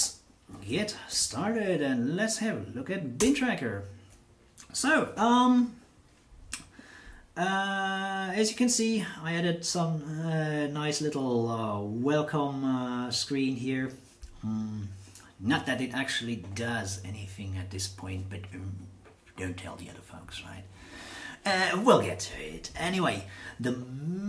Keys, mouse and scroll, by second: 3.2 Return.